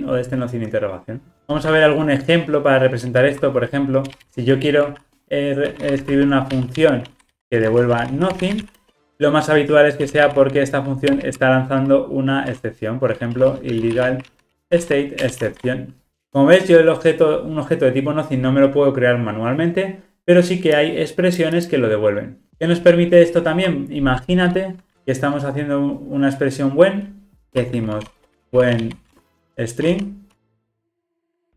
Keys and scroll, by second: 1.4 Tab, 11.1 Return, 14.5 Return.